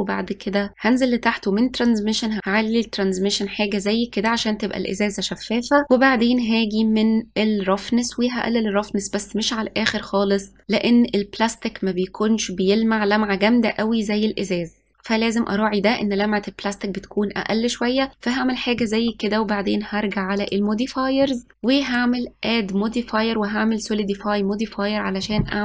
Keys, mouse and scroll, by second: 1.9 click, 4.9-5.6 scroll up 5, 8.1-10.6 drag, 20.5 click, 21.9 click.